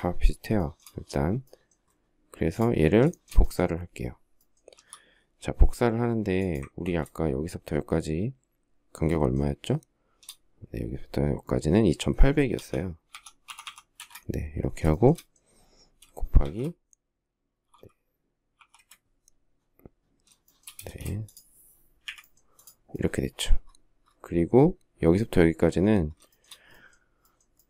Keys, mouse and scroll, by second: 0.4 shift+middle click, 0.5 shift+middle click, 2.9 shift+middle click, 4.5 m, 8.9 shift+middle click, 12.3-13.9 typing, 14.9 shift+middle click, 16.2 shift+8, 18.4 4, 18.5 Return, 20.3 shift+middle click, 20.6 space, 21.9 Delete, 26.1 shift+middle click.